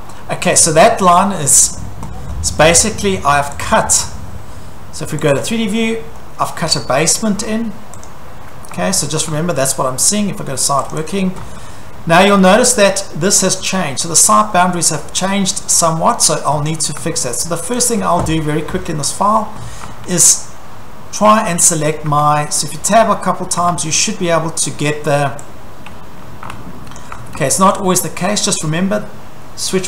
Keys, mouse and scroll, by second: 0.5 scroll, 0.6 Escape, 1.4 scroll, 1.6 Escape, 2.3 scroll, 3.6 click, 4.3 middle click, 4.4 Escape, 5.3 click, 6.5-7.4 shift+middle click, 6.6 scroll, 7.4 middle click, 7.4-8.1 scroll, 8.1 click, 8.7 middle click, 8.8 scroll, 8.9 Escape, 9.3 Escape, 10.9 click, 11.1 click, 11.5 Escape, 11.6 scroll, 12.1-12.7 scroll, 13.4 scroll, 14.1-15.5 scroll, 16.3-16.9 scroll, 17.0 Escape, 17.9 click, 18.4 scroll, 19.3 scroll, 19.9 Escape, 22.1 Caps_Lock, 24.3 scroll, 26.5 Escape, 27.0 click, 27.1 Escape, 27.4 Escape.